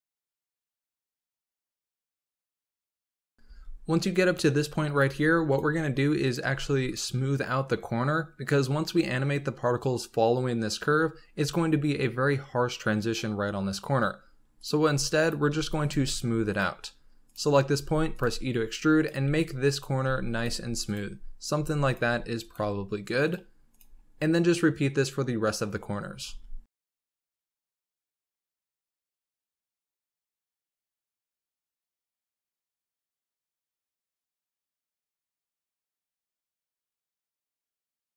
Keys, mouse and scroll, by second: 0.0-0.4 typing, 0.1 click, 0.4 click, 1.5 click, 1.6-3.4 typing, 2.0 click, 3.1 scroll up 2, 3.2 shift+middle click, 4.4 s, 5.0 g, 5.6 r, 6.3 g, 8.5-10.8 scroll down 5, 10.8-11.5 scroll up 7, 13.8 scroll down 3, 14.5 click, 14.8 g, 15.4 s, 15.9 g, 17.2 click, 17.4 scroll up 3, 17.8 r, 20.6 scroll up 3, 20.7 r, 20.8 click, 21.5 r, 22.0 s, 22.5 g, 23.6 click, 23.8-25.6 scroll down 4, 25.6-26.2 scroll up 3, 26.2-38.1 typing, 27.0 shift+middle click, 27.1 scroll up 3, 28.6 shift+middle click, 28.7 scroll down 3, 29.2 shift+middle click, 29.2 scroll up 3, 30.3 click, 30.6 click, 32.5 click, 32.8 click, 34.0 shift+middle click, 34.6 shift+middle click, 34.6 scroll up 3, 35.3 click, 35.7 click, 35.9 scroll down 2, 36.0 shift+middle click, 36.2 click, 36.5 click, 36.7 click, 37.3 scroll down 1, 37.4 shift+middle click.